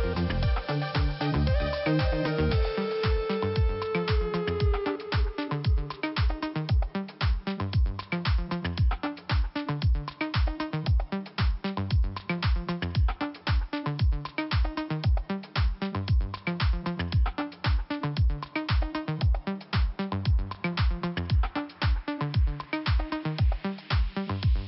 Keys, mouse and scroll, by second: 0.5 click, 2.7 click, 2.8 click, 3.4 click, 5.4 click, 7.0 scroll down 1, 7.8 middle click, 8.4-8.7 scroll up 2, 9.8 click, 12.0 click, 12.4 click, 12.4 click, 13.9 click, 15.4 click, 16.3 click, 17.1 click, 19.4 click, 21.0 click, 23.5 click.